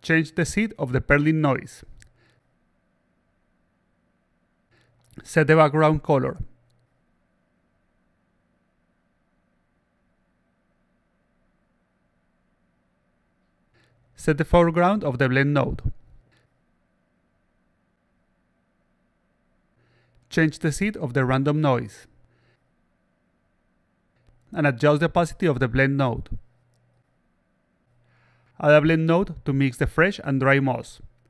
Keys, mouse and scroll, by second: 0.2 click, 2.2 click, 3.2 click, 3.3 click, 4.6 click, 5.5 click, 13.8 click, 14.6 click, 20.9 click, 21.0 click, 22.3 click, 23.4 click, 23.6 click, 24.8-27.6 drag, 28.8 click, 29.4 click, 30.2 click, 31.1 click.